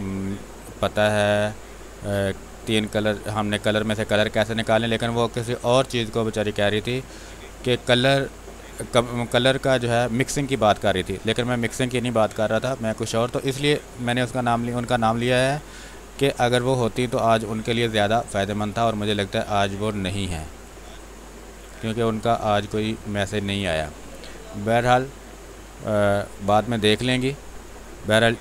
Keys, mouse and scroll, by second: 0.0 space, 1.1-7.5 drag, 7.5 x, 7.7-9.0 drag, 9.0 click, 9.9 space, 10.2 click, 11.2 r, 11.3 click, 12.0 b, 12.2 space, 12.5 click, 12.7 space, 13.7 click, 14.0 space, 15.2 click, 15.3 click, 16.2 x, 16.5 click, 17.1 space, 17.4 click, 17.6 space, 18.7-20.6 drag, 20.6 space, 20.8 click, 21.0 space, 21.9-23.5 drag, 23.5 space, 23.6 click, 24.0 space, 24.8-28.4 drag.